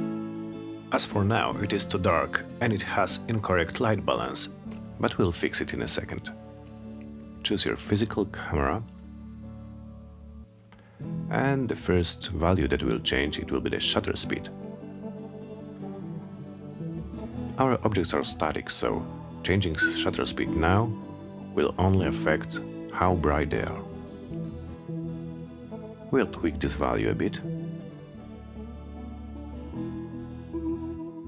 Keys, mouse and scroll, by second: 2.8 click, 3.9 click, 5.7 click, 8.4 click, 13.5-21.8 drag, 22.8-24.0 typing, 29.8-31.2 drag.